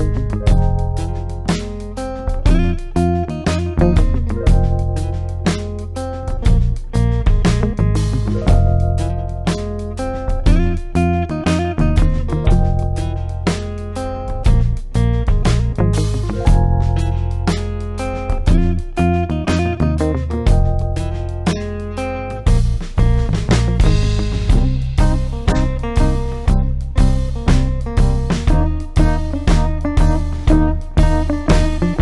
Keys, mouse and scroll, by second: 0.2-0.9 typing, 1.3 ctrl+space, 1.5 ctrl+click, 1.8-2.2 ctrl+space, 2.7 click, 4.8-5.5 typing, 8.9-10.3 typing, 10.2 scroll up 1, 11.5-12.3 typing, 11.9 scroll down 1, 12.4 scroll up 1, 13.9 click, 15.4-16.2 typing, 19.8 click, 23.1 click, 26.5-32.0 drag.